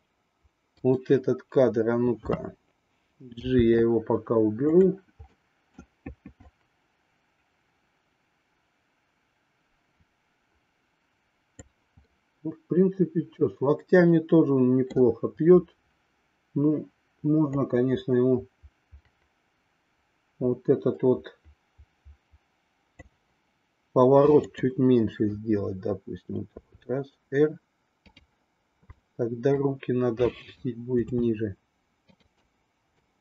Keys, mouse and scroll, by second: 0.7 click, 3.4 g, 5.3 middle click, 6.4-11.7 drag, 12.1-14.9 middle drag, 17.6-22.9 drag, 24.5-25.7 drag, 26.6 r, 28.9 middle click, 30.3-31.6 drag.